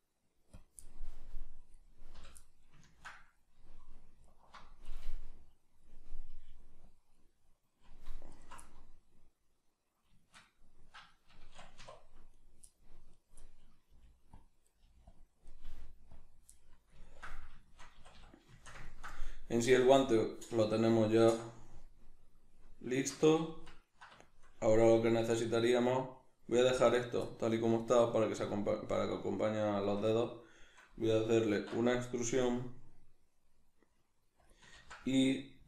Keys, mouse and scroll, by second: 0.6 click, 1.8 right click, 2.2 l, 2.4-4.2 middle drag, 4.2 alt+right click, 5.0-6.9 middle drag, 6.3 g, 6.9 click, 8.3 alt+right click, 8.6 middle click, 11.8 1, 12.3 right click, 12.7 middle click, 13.1 right click, 13.4 middle click, 13.9 g, 14.4 click, 14.7 right click, 14.8 g, 15.2 click, 15.5 right click, 15.6 g, 16.2 click, 16.5-34.6 middle drag, 18.0 a, 23.2 a, 31.5 alt+e, 34.6 click, 34.8 ctrl+z.